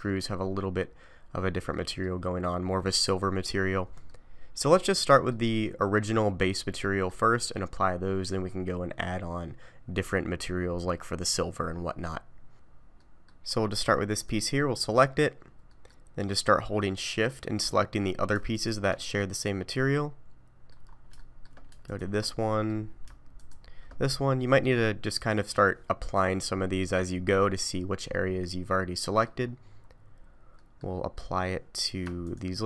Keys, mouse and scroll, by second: 1.7 middle click, 2.6 scroll up 1, 3.6 scroll down 1, 4.1 middle click, 6.0-6.6 scroll down 2, 6.8 middle click, 13.0 middle click, 13.5-14.1 scroll up 1, 14.1 click, 14.6 middle click, 15.7 middle click, 16.8 middle click, 18.5 shift+click, 19.1 middle click, 20.9 scroll up 2, 21.2 shift+middle click, 21.9 shift+click, 22.3 middle click, 23.3 shift+click, 24.0 scroll up 1, 24.6 middle click, 28.1 middle click, 29.5-30.6 scroll up 2, 30.6 middle click, 31.1 middle click, 32.2 shift+click.